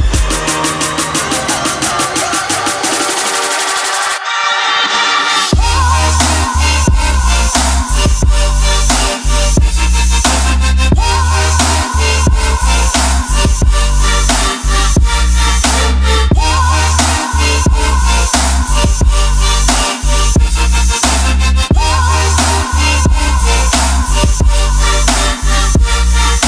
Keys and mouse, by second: 0.3 ctrl+middle click, 0.6 middle click, 1.0 ctrl+middle click, 1.4 shift+middle click, 1.7 ctrl+middle click, 6.4 middle click, 7.5 KP_1, 8.4 middle click, 9.6 ctrl+middle click, 11.0 middle click, 11.5 shift+a, 16.1 ctrl+shift+click, 16.8 middle click, 17.5 ctrl+shift+click, 18.4-21.0 drag, 21.3 middle click, 22.3 shift+a, 25.0 click, 25.9 ctrl+middle click.